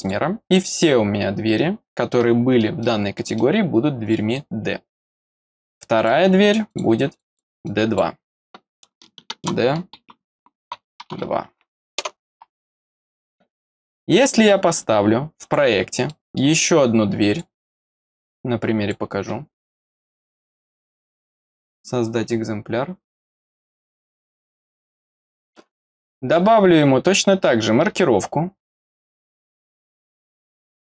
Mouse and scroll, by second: 0.0 click, 2.2 middle click, 2.8 middle click, 3.3-4.3 middle drag, 5.9 click, 7.2 click, 7.6 click, 13.1 click, 15.4 click, 15.7 scroll down 1, 16.0 middle click, 17.2 click, 18.2 click, 20.0 click, 23.4 click, 24.7 click, 30.3 click.